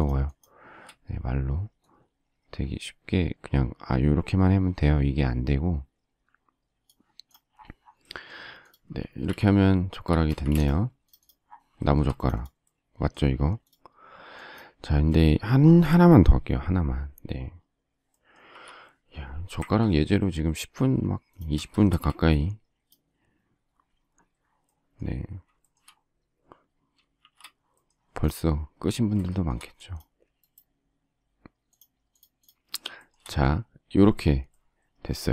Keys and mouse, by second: 7.4 middle click, 8.6 click, 9.0 click, 9.0 space, 9.2 Escape, 10.2 Escape, 10.3 space, 10.4 Escape, 10.6 click, 12.4 click, 12.8 middle click, 13.6 click, 13.8 click, 14.4 click, 18.5 m, 21.8 shift+space, 27.2 shift+c.